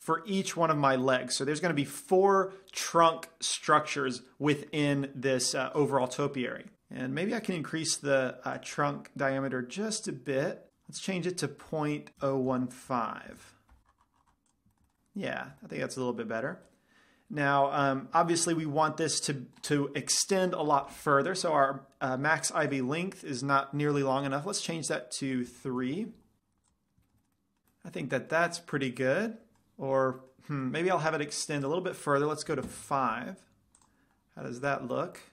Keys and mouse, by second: 7.8-12.1 drag, 14.0-14.8 middle drag, 14.6-15.9 drag, 14.8 right drag, 15.0 middle drag, 15.1 right click, 15.2 middle drag, 15.3 right drag, 15.4 middle click, 15.9-17.5 middle drag, 18.5-20.8 middle drag, 22.9 click, 26.9 click, 27.1-27.6 middle drag, 27.9 middle click, 29.4-31.3 middle drag, 32.1-34.2 drag, 34.8-35.3 middle drag.